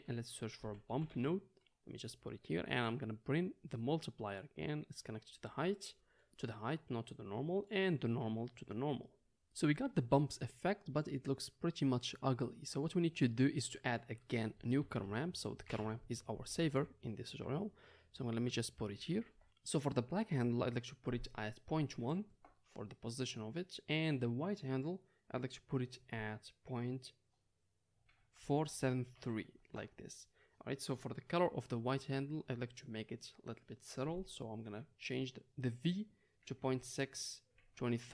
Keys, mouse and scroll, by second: 3.8-18.8 drag, 14.7 shift+a, 16.6 o, 18.8-20.9 middle drag, 20.9-32.3 drag, 32.3-38.1 middle drag.